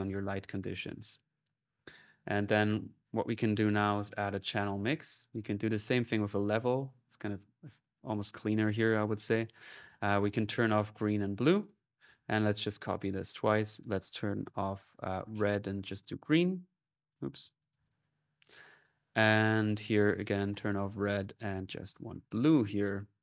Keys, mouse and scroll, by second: 0.7 middle click, 0.8 click, 2.5 right click, 2.8 click, 3.7-4.4 typing, 4.9-6.1 drag, 6.1 middle click, 6.7-7.9 drag, 8.5-9.6 drag, 9.8 click, 11.4 click, 12.0-12.5 typing, 12.8 ctrl+click, 13.5 ctrl+click, 15.3 click, 16.9 click, 17.7 click, 18.6 click, 19.8-20.9 drag, 21.0 click, 22.4 click.